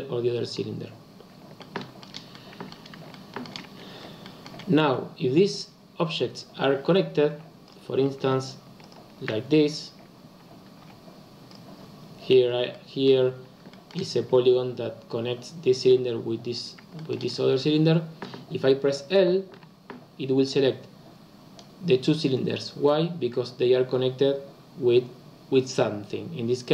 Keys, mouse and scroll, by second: 1.6-3.6 shift+middle drag, 3.6-4.2 scroll up 4, 4.2-7.2 shift+middle drag, 7.3 2, 7.6 click, 8.7 shift+click, 10.8 f, 11.4 click, 12.7 middle click, 13.1-13.6 scroll down 2, 13.6-16.5 shift+middle drag, 16.5-16.9 scroll down 2, 16.9-19.5 shift+middle drag, 19.5 l.